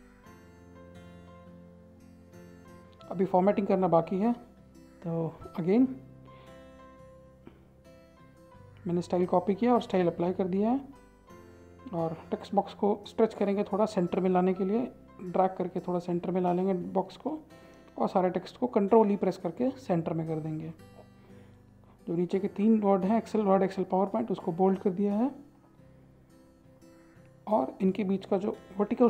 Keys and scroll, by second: 3.9 ctrl+a, 5.6 ctrl+a, 8.0 ctrl+a, 17.9 ctrl+a, 18.5 ctrl+e.